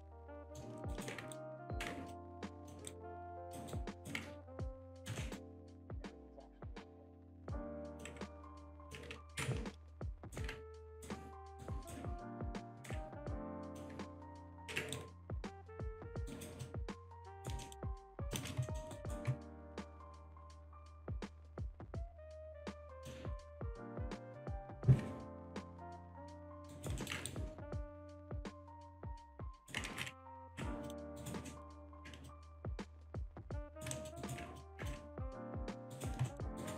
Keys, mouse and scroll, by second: 0.1 alt+shift+click, 0.4 alt+middle click, 0.9 alt+right click, 1.3 ctrl+right click, 2.1 ctrl+click, 2.9 ctrl+right click, 4.5 click, 5.0 alt+right click, 5.2 alt+middle click, 5.7 ctrl+click, 7.9 click, 8.7 alt+click, 9.2 ctrl+z, 10.7 ctrl+right click, 11.6 ctrl+right click, 12.6 ctrl+right click, 13.7 click, 14.6 ctrl+z, 14.9 ctrl+right click, 15.7 click, 16.3 alt+right click, 16.6 alt+click, 17.3 alt+right click, 18.0 alt+click, 18.3 alt+shift+click, 18.7 alt+middle click, 18.7 alt+scroll up 1, 18.9 alt+right click, 19.9 click, 20.4-21.1 scroll down 1, 21.5-21.9 scroll down 1, 22.4-22.8 scroll down 1, 23.3-23.7 scroll down 1, 24.1-24.5 scroll up 1, 25.6 click, 26.7 alt+right click, 27.3 ctrl+right click, 28.4 click, 29.2 alt+middle click, 29.6 alt+right click, 29.9 ctrl+z, 30.2 ctrl+right click, 30.9 click, 31.2 alt+right click, 31.5 alt+middle click, 32.3 ctrl+click, 33.7 alt+right click, 33.9 alt+middle click, 34.6 ctrl+click, 35.6 click, 35.9 alt+right click, 36.3 alt+middle click, 36.6 alt+right click.